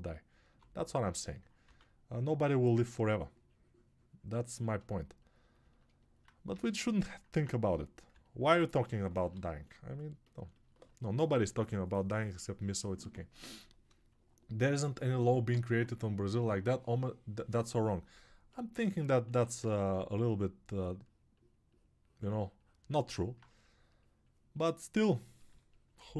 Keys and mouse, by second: 7.4-9.7 alt+drag, 7.4-9.7 alt+middle drag, 7.4-9.7 alt+right drag.